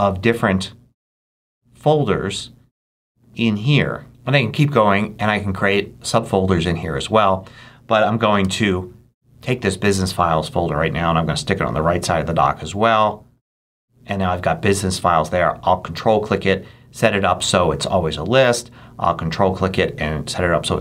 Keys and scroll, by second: 8.3 super+Up.